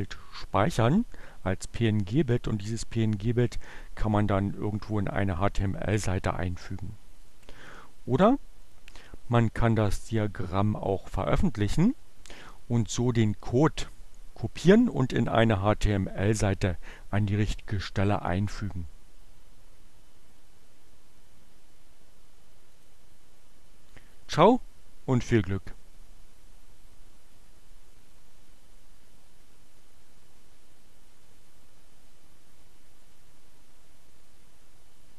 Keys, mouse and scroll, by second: 0.5 click, 5.7-7.5 drag, 8.6 click, 9.7 click, 11.5-12.9 drag, 22.2 click.